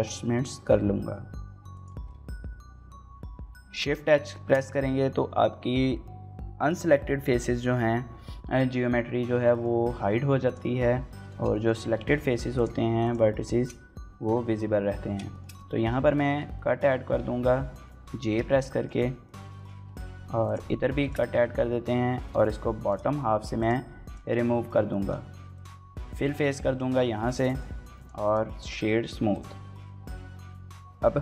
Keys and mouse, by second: 1.5 click, 1.6 s, 1.6 x, 2.1 click, 2.2 middle click, 3.1 shift+h, 3.4 shift+middle click, 4.1 shift+middle click, 9.3 shift+middle click, 10.2 click, 11.0 shift+middle click, 11.3 middle click, 12.3 click, 12.8 shift+click, 13.2 shift+middle click, 15.1 shift+middle click, 15.3 middle click, 15.9 shift+middle click, 16.3 middle click, 16.6 middle click, 17.0 ctrl+z, 17.9 j, 18.3 shift+middle click, 18.5 middle click, 19.0 shift+middle click, 19.3 middle click, 20.3 click, 22.6 click, 24.0 middle click, 24.3 shift+click, 24.8 middle click, 24.8-26.0 typing, 25.5 shift+middle click, 25.8 shift+middle click, 26.2 shift+middle click, 26.4 middle click, 27.1 shift+middle click, 27.3 middle click, 27.8 right click, 29.1 click.